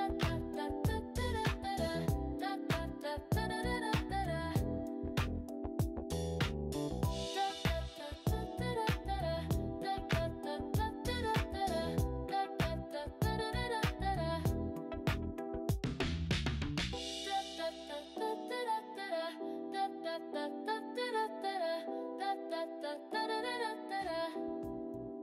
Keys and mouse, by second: 1.8 click, 6.2 click, 8.3 click, 10.0 click, 12.9 click, 14.7 click, 18.3-18.9 drag.